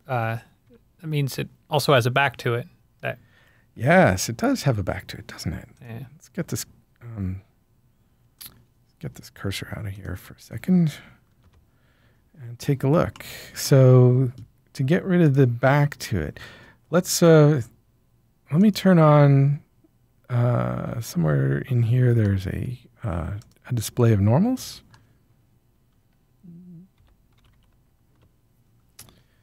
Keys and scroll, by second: 0.1 g, 0.6 z, 4.9 typing, 11.0-11.8 typing, 27.2-28.0 typing, 28.1 Return.